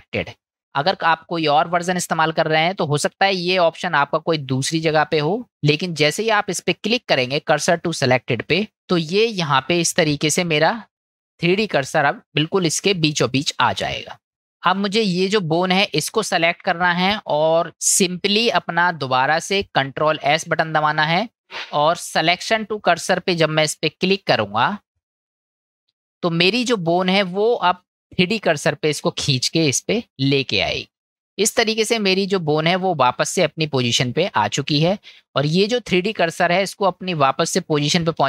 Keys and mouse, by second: 15.1 click, 20.3 shift+s.